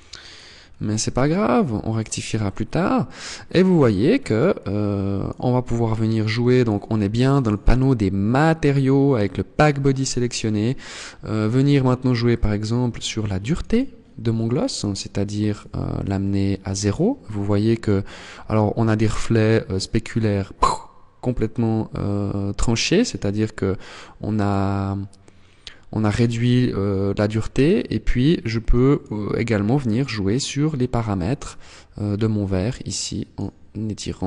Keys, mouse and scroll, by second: 0.1 scroll up 2, 1.7 shift+middle click, 4.6 click, 5.1 click, 6.2 click, 11.2 click, 14.5 click, 15.3 click, 22.7 click, 23.3 click, 26.7 click, 29.0 click, 31.7 click, 33.3 click.